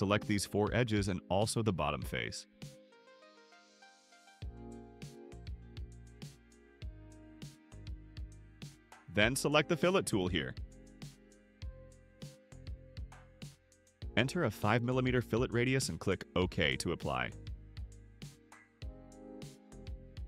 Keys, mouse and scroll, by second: 1.3 ctrl+click, 2.5 ctrl+click, 3.0 click, 4.9 ctrl+click, 5.6 ctrl+click, 7.1 ctrl+click, 13.1 click, 17.0 5, 18.6 click.